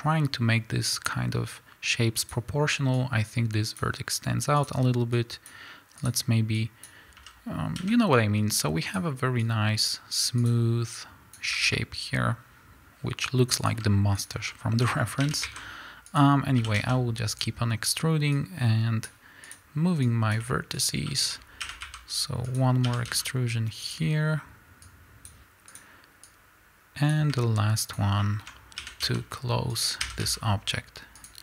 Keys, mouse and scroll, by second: 2.3 click, 4.6 click, 6.1 click, 7.3 z, 7.8 a, 8.9 click, 10.5 click, 11.5-13.7 drag, 11.6 a, 14.2 shift+click, 14.5-16.6 shift+middle drag, 15.2 e, 16.6 s, 18.3-19.5 drag, 20.1 click, 21.1-22.9 shift+middle drag, 21.4 scroll up 1, 21.6 e, 22.9 s, 24.3 click, 24.9 click, 26.2-28.0 drag, 28.2-29.8 shift+middle drag, 28.8 e, 29.8 click.